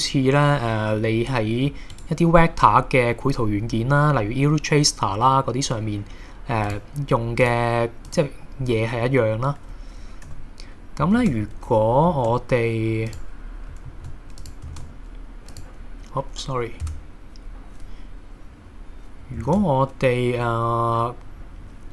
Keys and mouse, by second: 6.7 click, 7.5 click, 10.3 h, 11.2 shift+a, 12.3 shift+a, 13.9 ctrl+a, 14.7 shift+a, 16.9 Tab, 19.5 shift+a.